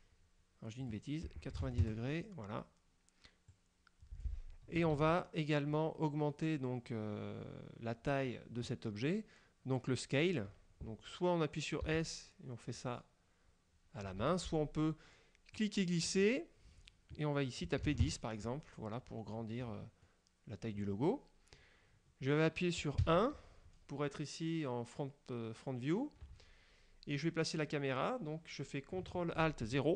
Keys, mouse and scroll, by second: 0.9 click, 1.7 KP_9, 1.9 KP_Enter, 3.6 click, 5.0 ctrl+z, 11.9 s, 14.3 Escape, 15.7 click, 17.9 KP_1, 18.1 KP_Enter, 19.1-20.0 scroll down 6, 20.1 click, 23.1 KP_1.